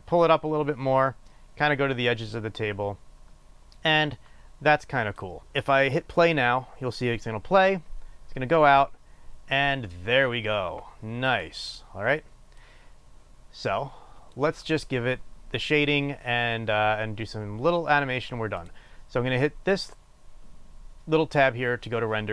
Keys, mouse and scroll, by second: 6.7-8.2 drag, 12.2 click, 13.2-19.3 drag.